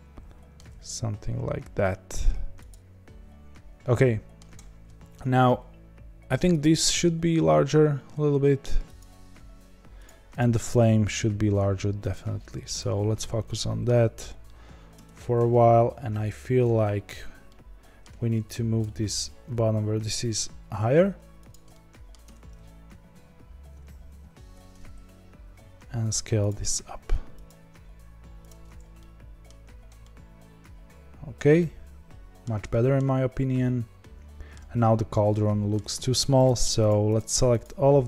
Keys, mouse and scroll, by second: 0.5 g, 2.8-4.4 middle drag, 4.4-6.5 scroll down 1, 6.5 click, 7.0 s, 8.9 click, 9.4 s, 10.3 click, 10.7 s, 12.7 KP_Decimal, 13.4-14.9 middle drag, 14.9 Tab, 16.6 z, 17.4 middle click, 18.1 1, 18.8 click, 19.4 g, 21.6 middle click, 22.1 scroll down 1, 22.2 Tab, 24.5 z, 25.5 s, 26.4 g, 27.5 s, 28.6-28.9 scroll down 4, 28.9-29.4 middle drag, 29.4-29.9 scroll down 6, 29.9-36.4 middle drag, 36.4 click, 36.8 shift+click, 37.1 shift+click, 37.8 shift+click.